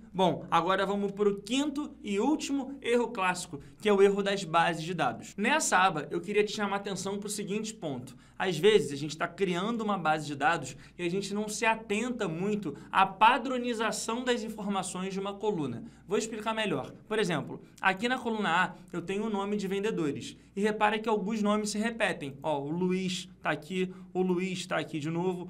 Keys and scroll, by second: 1.2 ctrl+Page_Down.